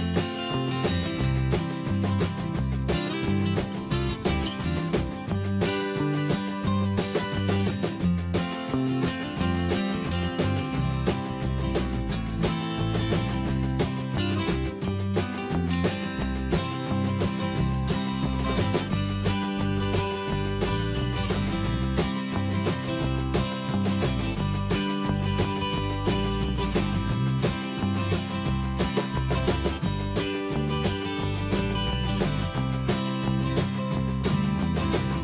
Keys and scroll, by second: 7.1 ctrl+alt+2, 19.3 alt+Tab, 21.5 ctrl+c, 26.2 ctrl+v, 26.6 Escape.